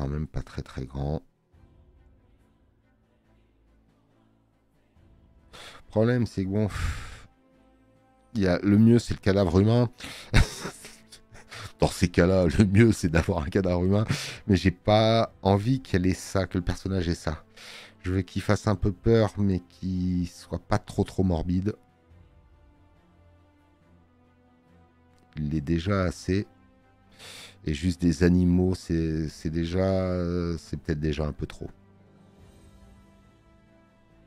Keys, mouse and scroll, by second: 30.0 click.